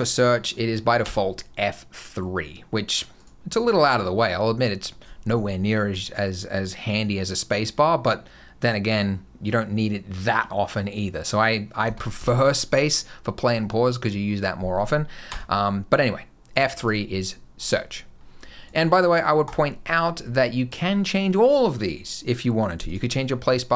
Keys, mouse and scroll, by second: 0.9 F3, 11.7 space, 12.0 space, 15.1 F3, 17.4 click, 18.5 click.